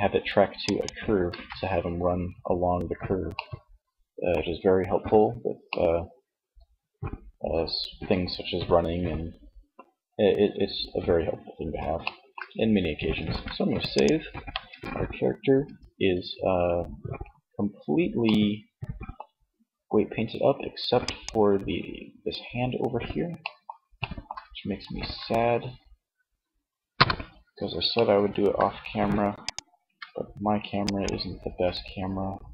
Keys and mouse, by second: 0.6 ctrl+z, 2.8 middle click, 4.8-6.4 middle drag, 7.2-11.3 middle drag, 12.4 ctrl+s, 13.6 Tab, 14.8 Tab, 21.1 Tab, 26.0 KP_1, 29.0 Tab.